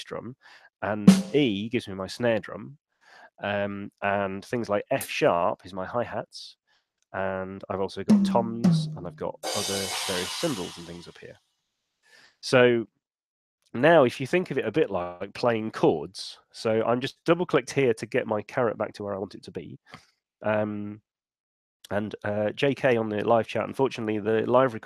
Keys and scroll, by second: 12.0 Escape, 13.8 BackSpace.